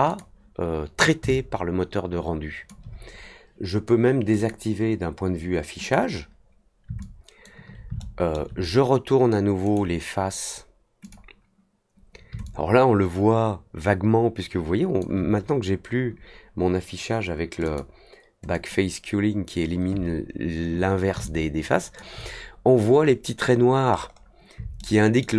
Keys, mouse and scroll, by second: 0.0 click, 1.2-2.6 alt+drag, 4.3 click, 5.8 click, 6.9-7.4 alt+drag, 7.9-8.3 alt+middle drag, 9.6 right click, 11.0 click, 12.4-14.9 alt+drag, 17.6 click, 18.5 click, 21.2-21.9 alt+drag, 23.9-24.2 scroll up 1, 24.7-25.1 alt+middle drag.